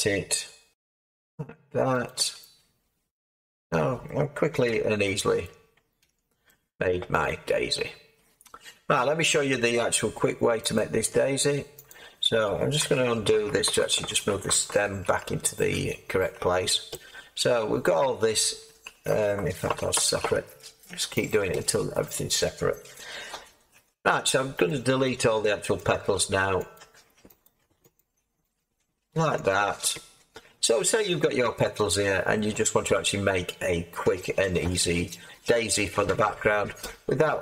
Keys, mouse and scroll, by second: 0.7 r, 0.7 z, 4.6 Tab, 5.4 Tab, 6.0 Tab, 13.6 ctrl+z, 19.6 ctrl+z, 24.0 x, 25.3 x, 26.2 x, 27.6 x, 29.1 x.